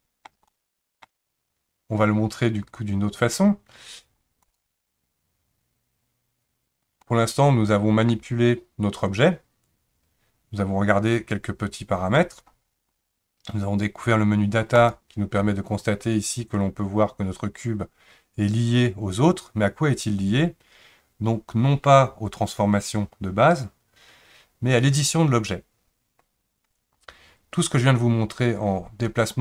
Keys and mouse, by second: 0.5-1.1 shift+middle drag, 4.5 click, 7.1-8.1 middle drag, 14.7 click.